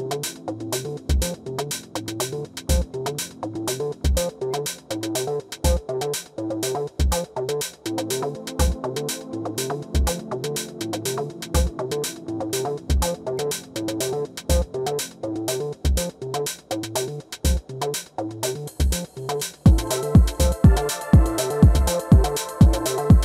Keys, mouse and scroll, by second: 3.0-5.6 right drag, 7.8-13.4 right drag, 14.1-16.0 right drag, 16.1 right click, 17.9-19.7 right drag, 18.3 r, 20.6 g, 21.9-23.2 middle drag.